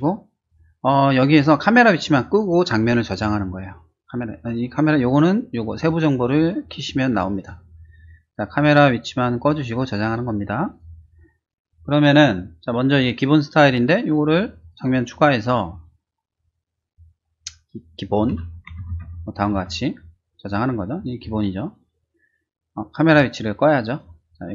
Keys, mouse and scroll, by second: 2.3 click, 5.8 click, 6.4 click, 6.8 click, 7.3 click, 10.7 click, 14.6 click, 16.5 click, 18.3-18.9 typing, 19.5 Return.